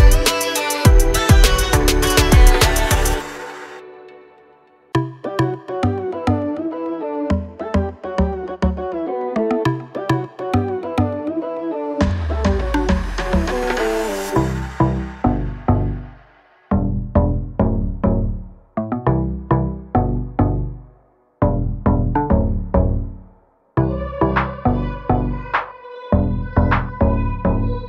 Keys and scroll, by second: 4.5-5.4 typing, 8.7 Escape, 12.1 space, 12.6 e, 19.3 space, 20.9 m, 23.6 space, 23.7 Escape, 26.9 p, 27.5 1, 27.7 0.